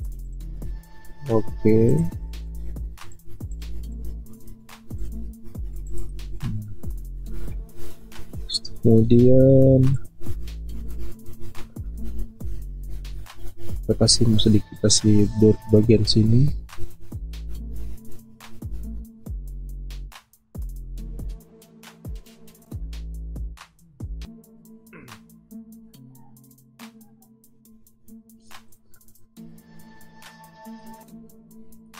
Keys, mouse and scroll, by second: 0.2 typing, 20.8 b, 23.0 ctrl+alt+z, 31.8 alt+click.